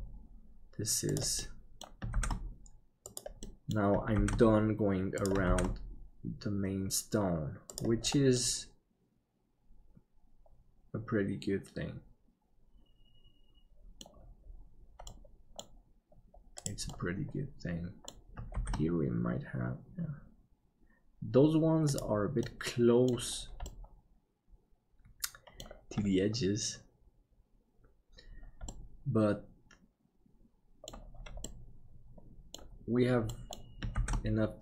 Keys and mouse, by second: 1.4 middle click, 3.6 middle click, 8.4-14.1 middle drag, 15.3 middle click, 16.9-18.1 middle drag, 18.6 shift+d, 22.4 middle click, 23.8-25.7 middle drag, 28.9-30.9 middle drag, 31.4-32.6 middle drag, 33.4 middle click, 34.0 shift+d.